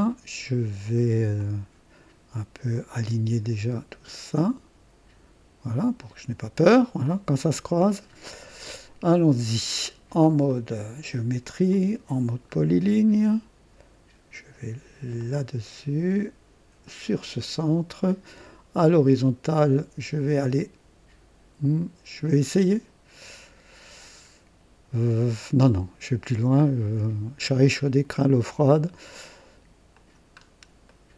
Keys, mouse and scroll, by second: 1.3-3.3 drag, 4.3-6.9 drag, 7.0 right click, 10.4 click, 11.7 click, 12.5 scroll up 1, 15.1 click, 16.8 click, 17.4-18.7 right drag, 26.6 click, 27.6 right click, 28.7 right click, 29.9 click, 30.4 scroll down 1, 30.9 right click.